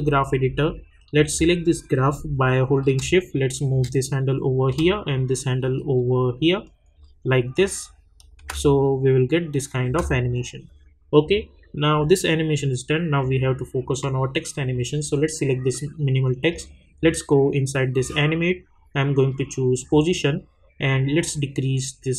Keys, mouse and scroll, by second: 4.6-7.5 drag, 8.4 space, 10.4 click, 16.5-22.1 drag.